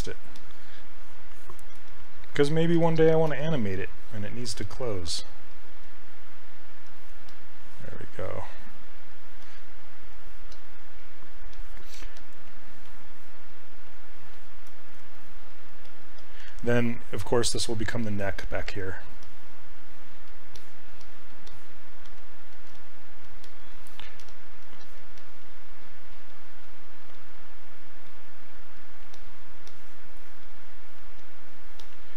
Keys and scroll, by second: 3.3 s, 5.1 s, 22.0 s, 22.7 s, 24.3 s, 27.2 s, 30.4 s.